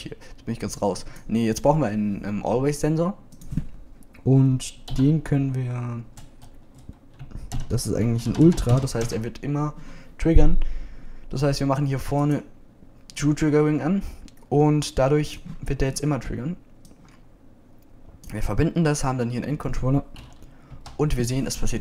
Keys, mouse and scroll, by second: 18.4-20.5 drag, 21.7 p.